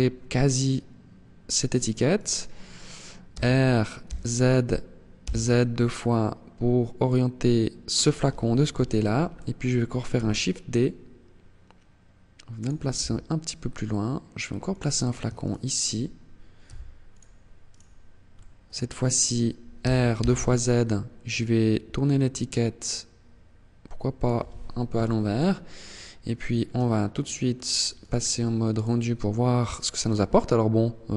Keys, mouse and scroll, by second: 1.1 click, 1.3 right click, 2.4 r, 7.1 click, 7.9 KP_7, 9.3 shift+d, 9.8 click, 11.8 click, 12.1 r, 14.0 click, 14.6 shift+right click, 15.8 g, 16.3 click, 16.9 right click, 17.5 middle click, 18.9 r, 23.5 click, 24.1 KP_0, 24.9 scroll down 2, 26.7 click, 27.1 click.